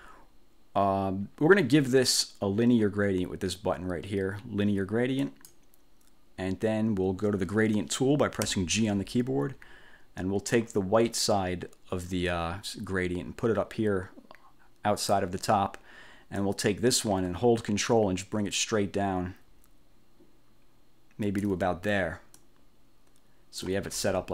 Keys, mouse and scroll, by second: 5.4 click, 8.6 g, 10.6-15.4 drag, 16.5-21.7 drag, 22.4-23.9 ctrl+drag.